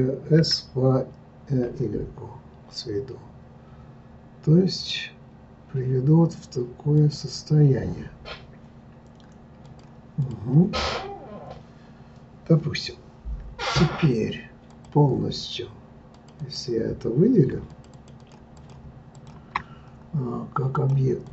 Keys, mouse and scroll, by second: 0.4 s, 9.6 click, 10.2 click, 14.7 click, 16.1 click, 16.4 click, 17.7 shift+click, 17.9 shift+click, 18.2 shift+click, 18.5 shift+click, 19.1 shift+click, 20.7 click.